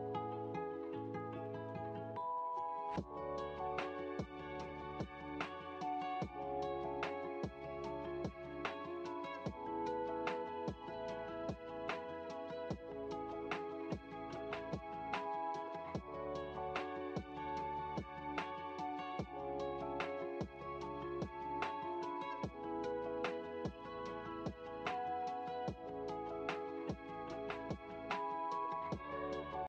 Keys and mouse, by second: 1.4 click, 3.3-9.2 drag, 9.7-11.6 middle drag, 12.7-13.7 drag, 15.3-21.1 drag, 21.5-24.0 middle drag.